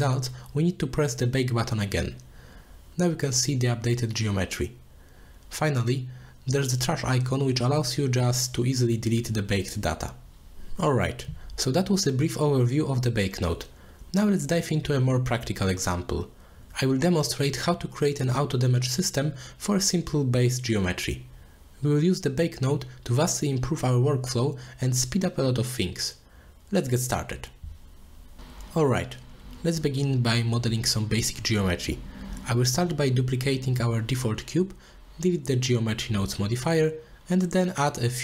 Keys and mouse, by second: 0.3 click, 0.6-1.5 middle drag, 2.1-3.5 middle drag, 7.3 middle drag, 8.1-8.8 drag, 10.2 middle click, 17.8 middle click, 18.5 middle click, 19.0 middle click, 19.5-19.8 middle drag, 20.0-20.5 middle drag, 20.9 middle click, 22.4 middle drag, 23.1 middle click, 23.2 click, 24.0 middle drag, 24.7-25.1 middle drag, 25.7 middle click, 26.3 middle drag, 32.3 middle click, 34.0 shift+d, 36.4 click, 37.5 middle click.